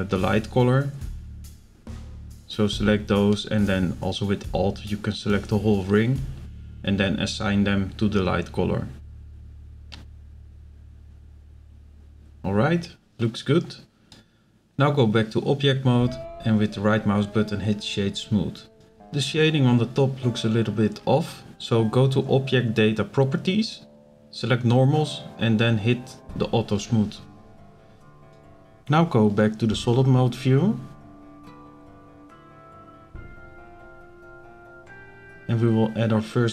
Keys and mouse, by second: 1.4 click, 1.9 click, 2.7 click, 3.1 alt+click, 4.1 click, 5.5 click, 6.0 alt+click, 7.2 click, 7.9 click, 8.6 click, 10.2 click, 11.4 click, 12.1 middle click, 14.5 click, 15.3 right click, 18.8 click, 19.5 click, 19.9 click, 22.5 click, 23.8 click, 24.5-25.1 middle drag, 25.4-25.8 shift+middle drag, 29.7 click, 30.8 z, 32.1-33.2 drag, 32.1-33.2 right drag, 33.7 click, 35.0-35.5 drag.